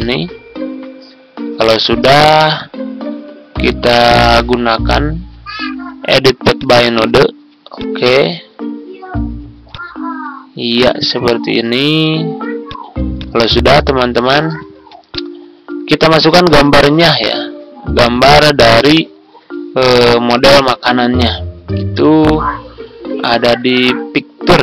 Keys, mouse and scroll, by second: 0.8 scroll down 1, 2.1 Down, 2.3 Down, 2.7 typing, 6.5-11.8 drag, 13.5-13.9 ctrl+scroll down 1, 14.7 ctrl+z, 15.0-19.7 drag, 19.7 Delete, 21.7 Tab, 24.1 Tab.